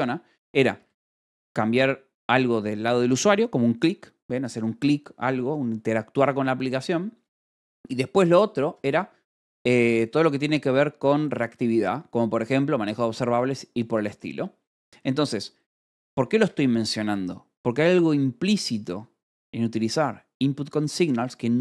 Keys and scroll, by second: 0.9 k, 1.8 shift+v, 5.1 Escape, 13.7 Escape, 14.9 k, 16.8 shift+v, 17.5 Escape.